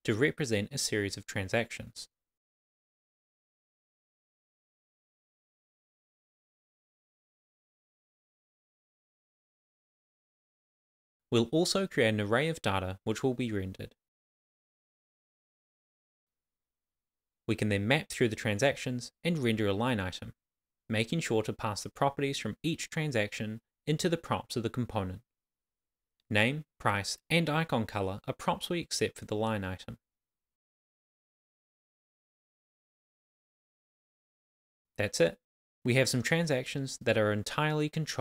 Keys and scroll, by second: 0.5-2.4 typing, 3.6 Return, 4.3-7.5 typing, 13.9 Return, 14.0 super+v, 16.3 super+c, 17.0 super+v, 19.0 super+s, 21.4 Return, 22.2 Tab, 22.9 shift+[, 22.9 shift+], 23.0 Left, 24.7 Down, 24.9 Tab, 25.3 Right, 25.7 Return, 26.5 shift+[, 26.5 shift+], 26.6 Left, 28.2 Right, 28.5 Return, 29.3 shift+c, 29.9 shift+[, 29.9 shift+], 30.1 Left, 32.3 Tab, 32.5 super+s.